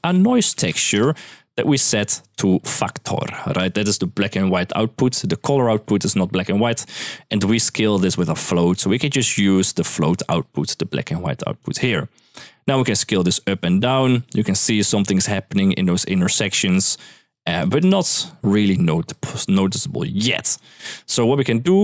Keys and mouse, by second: 1.4 click, 1.9 click, 4.9 middle click, 7.8 middle click, 11.4-11.7 drag, 12.1 middle click, 12.7-16.2 drag, 16.3-17.6 drag, 18.9 middle click, 19.5 drag, 20.0 g, 20.3 click, 21.2 click.